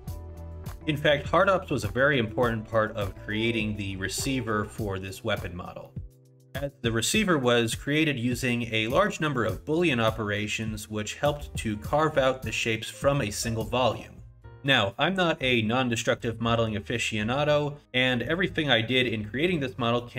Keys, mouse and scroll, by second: 0.1 Tab, 5.9 middle click, 6.1 click, 9.0 middle click, 11.5 scroll up 1, 13.1 middle click, 16.2 middle click, 17.1 scroll up 1, 17.5 middle click, 18.7 middle click, 19.5 middle click, 20.0 scroll down 1.